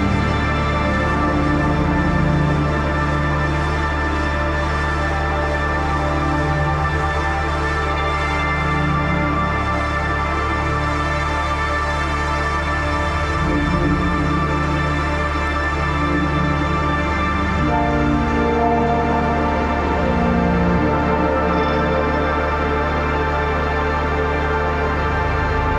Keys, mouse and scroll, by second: 1.3 ctrl+=, 2.1 click, 2.8-4.2 alt+shift+drag, 4.5 Left, 5.2 click, 5.3 space, 5.9-7.8 drag, 8.0 click, 9.3 click, 10.7-15.2 typing, 16.6-20.2 typing, 20.9 click, 23.1 click.